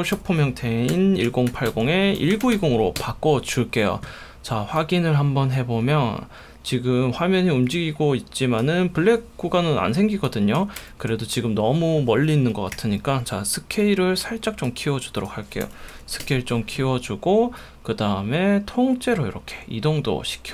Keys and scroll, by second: 0.2-3.1 typing, 10.8 1, 12.7 s, 15.4-16.7 typing.